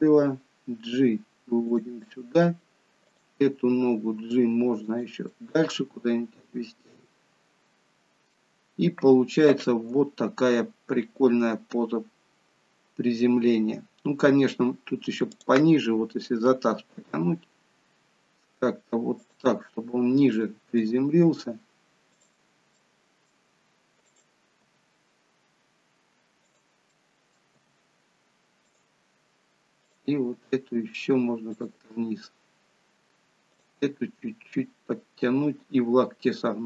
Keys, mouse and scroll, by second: 2.0 middle click, 2.0-2.8 scroll up 1, 3.1 click, 3.6 g, 5.4 middle click, 8.7-9.3 scroll down 2, 15.4 click, 16.8 g, 20.4 click, 20.9 g, 22.9 middle click, 24.1 click, 24.7 g, 26.9 middle click, 27.7 g, 29.9 click, 30.4 g, 33.6 click, 33.9 g.